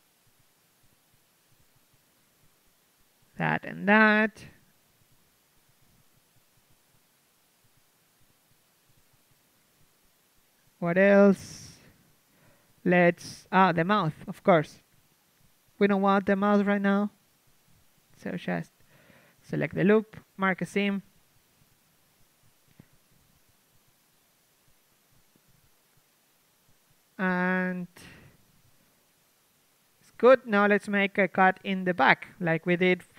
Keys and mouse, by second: 2.3 ctrl+e, 3.5 click, 4.2 right click, 4.2 z, 4.9-6.0 drag, 4.9 z, 6.2-8.9 drag, 7.2 z, 8.0 z, 8.3 ctrl+e, 9.0 a, 12.6 KP_3, 13.2-14.2 drag, 15.6-17.8 drag, 17.8-19.2 right drag, 19.2 middle click, 20.0 z, 21.4 z, 24.3 ctrl+e, 25.4 a, 25.6 z, 27.0 z, 28.7 KP_3.